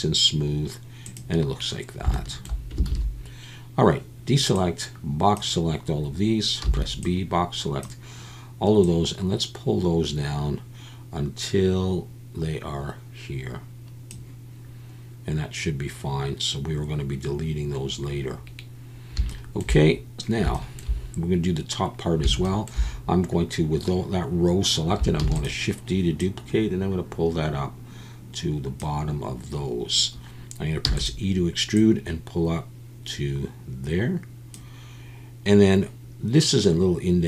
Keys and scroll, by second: 2.9 alt+a, 6.6 b, 25.2 shift+d, 30.8 e.